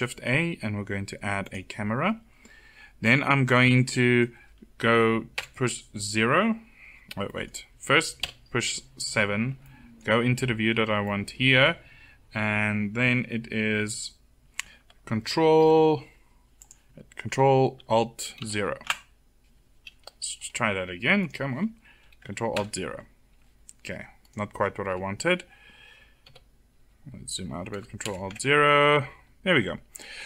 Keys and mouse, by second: 5.0 KP_0, 7.8 Page_Down, 7.8 KP_7, 18.0 ctrl+alt+KP_0, 22.2 ctrl+alt+KP_0, 24.5 a, 25.9 KP_7, 27.7 ctrl+alt+KP_0.